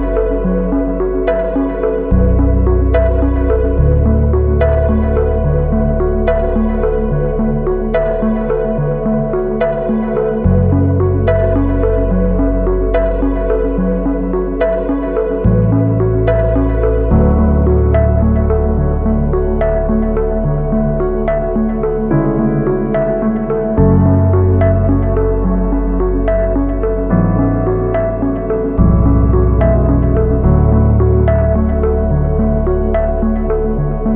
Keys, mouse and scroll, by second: 3.1 e, 17.1 double click.